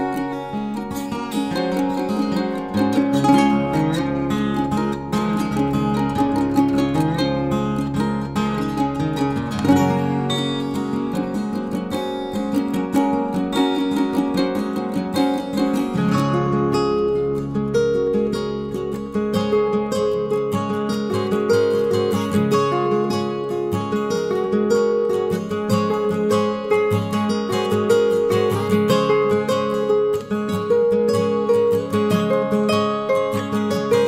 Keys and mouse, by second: 0.8 click, 1.2 shift+middle drag, 2.8 ctrl+r, 4.4 drag, 4.9 shift+middle click, 6.2 ctrl+r, 7.7-8.1 middle drag, 8.3 shift+middle click, 8.7 middle click, 9.4 shift+middle click, 11.2 shift+middle click, 12.1 shift+middle click, 12.5-13.2 middle drag, 13.4 shift+middle drag, 13.9 middle click, 14.4 shift+middle click, 15.3 shift+middle click, 19.4 ctrl+r, 21.4 click, 22.1 middle click, 22.5 shift+middle click, 22.9 middle click, 23.4 shift+middle click, 23.7 middle click, 24.6 KP_3, 26.0 shift+middle click, 26.7 shift+middle click, 27.4 shift+middle click, 28.0 shift+middle click, 29.4 shift+middle click, 29.9 shift+middle click, 30.4 shift+middle drag, 30.9 shift+middle click, 31.7-32.0 shift+middle drag.